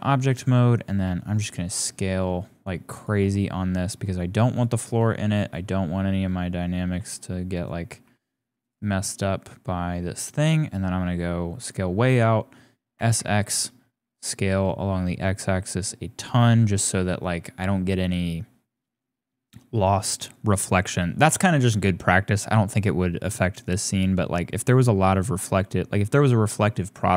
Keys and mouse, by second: 1.0 s, 3.0 s, 3.1 g, 4.7 g, 5.7-6.7 drag, 6.9 g, 7.7 g, 9.0-10.2 drag, 11.5 click, 12.9 s.